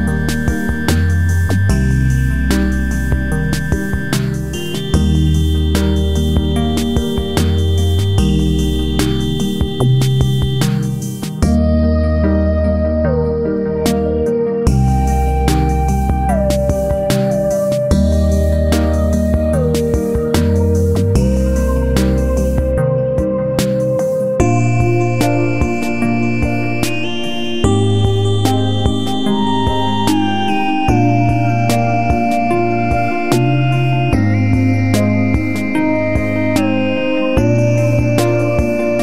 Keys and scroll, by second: 9.6 ctrl+g, 12.6 ctrl+g, 23.5 ctrl+z.